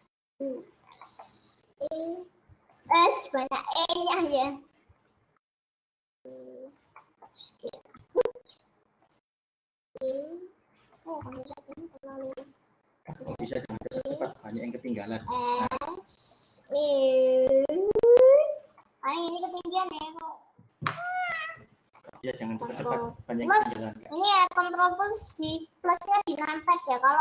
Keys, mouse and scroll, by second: 0.2 s, 1.2 middle click, 1.8 e, 3.1 s, 4.2 e, 5.7 s, 6.1 e, 7.0-8.6 middle drag, 8.6 s, 9.4 middle click, 10.0 e, 11.4 ctrl+z, 12.2 s, 13.2 e, 15.3 s, 16.8 e, 19.2-21.7 middle drag, 21.7-22.2 scroll down 1, 22.2-23.6 middle drag.